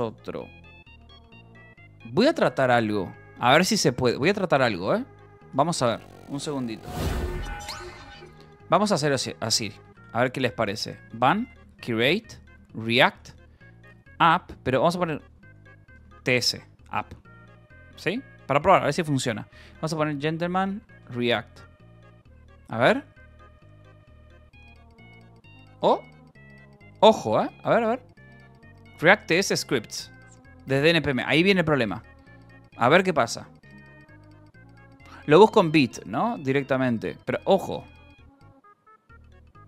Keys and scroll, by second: 9.7-16.6 typing, 10.2 Return, 17.0 Right, 17.7-21.5 typing.